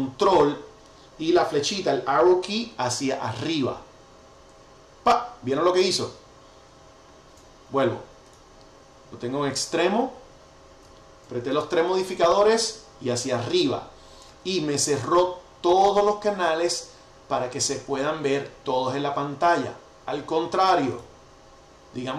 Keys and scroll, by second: 4.3 ctrl+alt+super+Up, 6.6 ctrl+alt+super+Up, 13.4 ctrl+alt+super+Up.